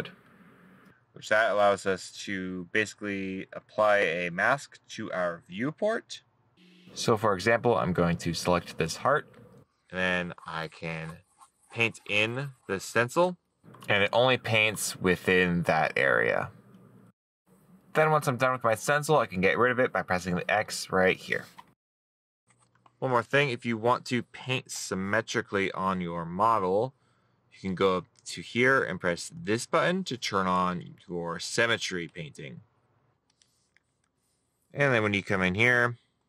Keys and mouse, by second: 9.6 right click, 15.6 middle click, 16.9 right click, 32.1 middle click, 35.0 middle click, 35.6 middle click.